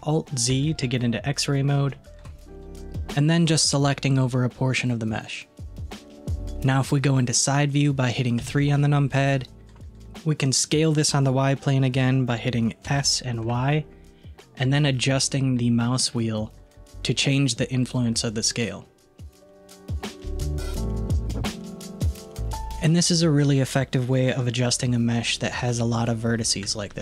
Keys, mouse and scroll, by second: 0.6 alt+z, 1.6-2.0 scroll up 1, 2.0 shift+middle click, 3.1 click, 6.1 scroll down 1, 8.4 KP_3, 13.0 s, 23.0-24.9 middle drag, 25.6-26.7 middle drag, 26.7 Tab.